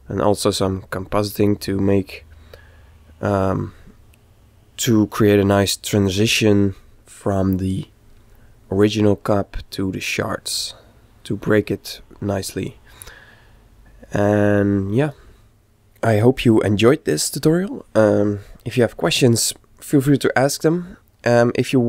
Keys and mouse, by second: 0.4-2.2 middle drag, 4.2-5.9 middle drag.